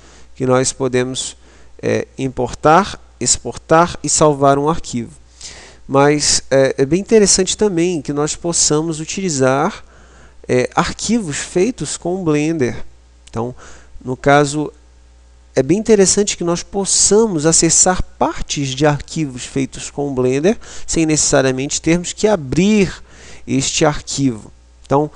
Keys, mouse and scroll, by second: 1.1-25.1 middle drag.